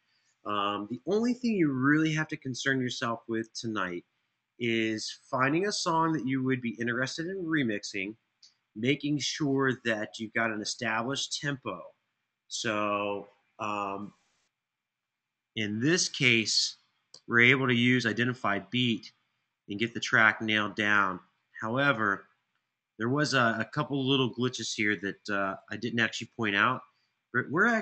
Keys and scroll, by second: 16.7 Return, 25.5 super+], 25.9 super+].